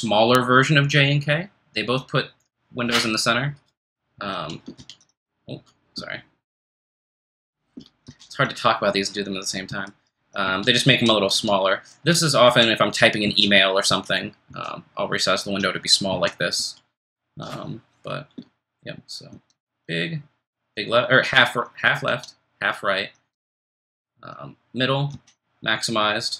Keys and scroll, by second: 7.5 ctrl+f, 7.5 1, 8.1 ctrl+shift+super+n, 9.6 ctrl+shift+super+m, 10.4 ctrl+shift+super+n, 10.9 ctrl+shift+super+m, 11.7 ctrl+shift+super+m, 12.0 ctrl+shift+super+n, 12.4 ctrl+shift+super+m, 13.2 ctrl+shift+super+m, 13.9 ctrl+shift+super+n, 14.5 ctrl+shift+super+m, 16.1 ctrl+shift+super+m, 16.9 ctrl+shift+super+n, 19.3 ctrl+shift+super+h, 22.1 ctrl+shift+super+l, 23.3 ctrl+shift+super+j, 25.1 ctrl+shift+super+k.